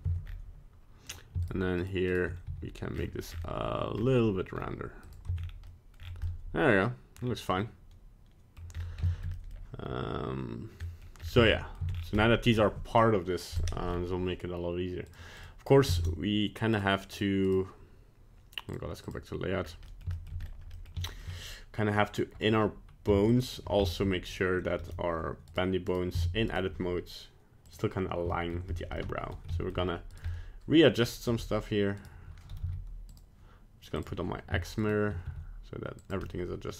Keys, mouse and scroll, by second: 19.1 right click, 19.1 click, 19.6-20.0 scroll up 2, 19.8 middle click, 20.1 shift+middle click, 20.4-20.8 scroll up 2, 20.7 middle click, 21.0 shift+middle click, 21.2 scroll down 1, 22.0 middle click, 23.3 shift+click, 23.8 shift+middle click, 24.3 right click, 25.5 right click, 26.2 Tab, 26.2 right click, 26.5 right click, 27.6 click, 28.3 shift+middle click, 28.9 middle click, 29.5 shift+middle click, 30.1 right click, 30.2 middle click, 31.0 middle click, 31.0 shift+middle click, 31.2 g, 32.6 z, 34.0 click, 34.8 shift+right click, 35.2 g, 36.2 middle click.